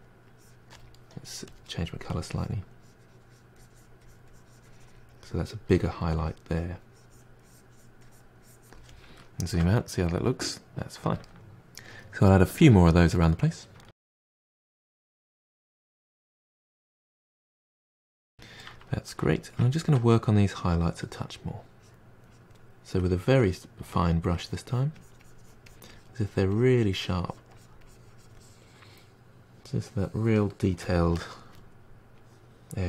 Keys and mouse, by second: 0.3-1.6 drag, 2.3-5.7 drag, 5.7 f, 6.2-9.2 drag, 9.2-12.0 ctrl+middle drag, 12.1 click, 12.3 f, 12.4 f, 12.5-13.1 drag, 13.1-13.8 ctrl+middle drag, 13.8 f, 13.9 f, 14.2-15.5 drag, 15.6 ctrl+shift+middle drag, 15.9 f, 16.0 click, 16.2 f, 16.4-17.8 drag, 17.8-19.5 ctrl+middle drag, 19.5-20.6 drag, 20.6 f, 20.9 f, 21.1-22.6 drag, 22.6-23.0 middle drag, 23.0-25.0 drag, 25.0-25.4 middle drag, 25.4-28.2 drag, 28.2-28.5 middle drag, 28.5-31.8 drag, 31.9-32.3 middle drag, 32.3-32.8 drag.